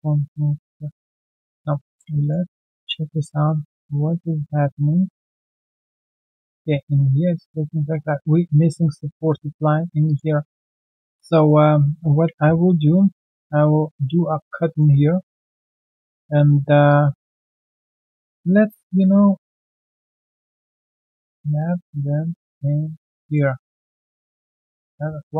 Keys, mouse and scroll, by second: 0.8 ctrl+z, 2.2 alt+right click, 2.4 alt+middle click, 2.7 alt+right click, 3.0 alt+middle click, 3.9-4.5 ctrl+scroll down 1, 4.5 ctrl+z, 5.4 ctrl+z, 6.0 ctrl+scroll down 1, 6.4 alt+middle click, 7.1 right click, 8.4-8.8 alt+scroll down 1, 10.3 ctrl+1, 10.5-10.9 alt+scroll down 1, 10.9 alt+middle click, 11.1 alt+scroll down 1, 11.4 alt+middle click, 12.2 ctrl+shift+x, 14.4 alt+right click, 14.6 alt+middle click, 14.9 q, 14.9 right click, 17.7 right click, 19.3 ctrl+shift+q, 20.9 alt+middle click, 22.8 alt+right click, 23.1 alt+middle click, 23.9 alt+click, 24.9 alt+middle click.